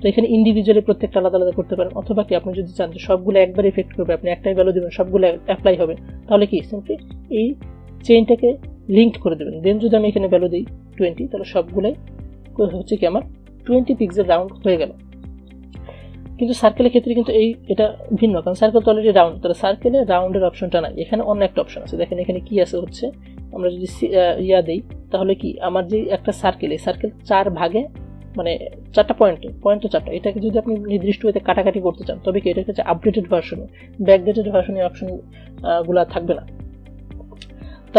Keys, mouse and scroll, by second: 7.2 click, 9.8 click, 12.9-22.9 drag, 22.9 click, 32.1 click, 35.8 click, 37.1 ctrl+z.